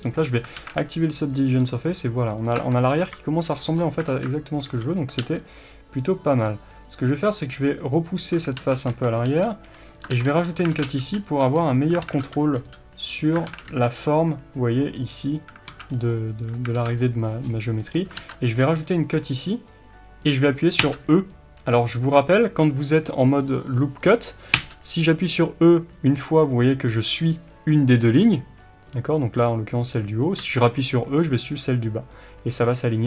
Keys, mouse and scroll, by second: 0.4 scroll up 2, 0.6 alt+a, 2.6 Tab, 3.0 KP_3, 3.8-4.1 scroll up 2, 4.1 alt+z, 5.0 b, 8.6 alt+a, 9.2 b, 10.1 ctrl+r, 10.7 alt+a, 11.3 b, 12.0 alt+a, 12.4 b, 13.5 alt+a, 14.0 b, 15.7 alt+a, 15.9 scroll down 1, 16.1-33.0 middle drag, 16.8 alt+z, 17.5-17.8 scroll up 1, 18.2 ctrl+r.